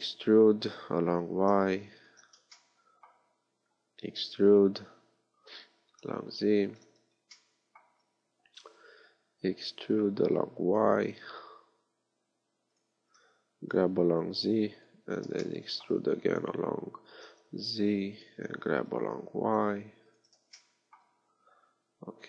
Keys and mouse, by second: 2.6 click, 4.5 e, 13.8 g, 16.4 e, 19.0 g, 20.6-22.2 drag.